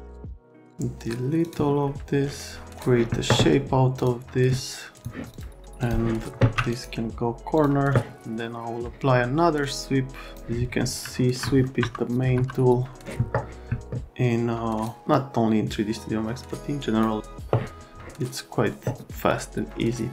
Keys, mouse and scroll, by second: 0.0 click, 0.2 click, 1.4 click, 2.7 click, 4.0 click, 4.9 click, 5.3 click, 5.8 click, 6.4 a, 6.7 right click, 7.6 click, 11.0 alt+middle click, 11.6 middle click, 11.8 F3, 12.4 F3, 14.1 click, 15.1 click, 19.3 click.